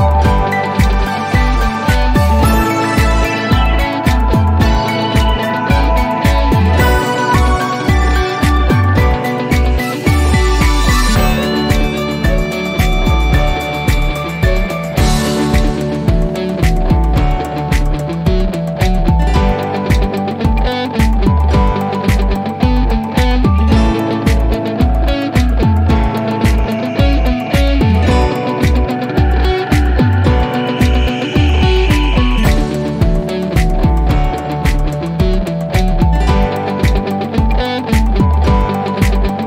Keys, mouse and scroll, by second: 3.3 click, 5.1 click, 7.9 click, 12.4 click, 14.4 click, 16.1 click, 18.2 click, 21.2 click, 21.2 click, 29.4 click, 34.1 click.